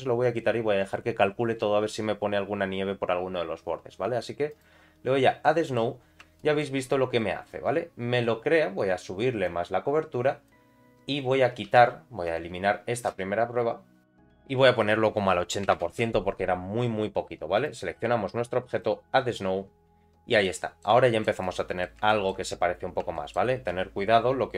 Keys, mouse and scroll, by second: 4.5 click, 5.4 middle click, 6.0 scroll up 2, 6.4 shift+middle click, 6.8 scroll down 2, 7.2 middle click, 7.7 scroll up 1, 9.4-10.6 drag, 11.7 x, 14.8-16.9 drag, 17.5 click, 18.7 click, 20.0 scroll down 3, 20.4 middle click, 21.0 shift+middle click, 21.4 middle click, 22.1 shift+middle click, 22.5 scroll up 2, 23.2 shift+middle click.